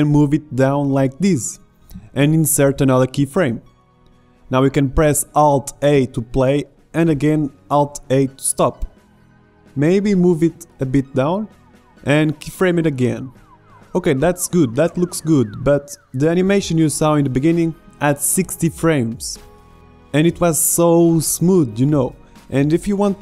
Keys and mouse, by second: 3.0 i, 4.1-5.2 middle drag, 5.2 click, 5.9 alt+a, 7.5 alt+a, 11.7 i, 17.3-23.2 drag.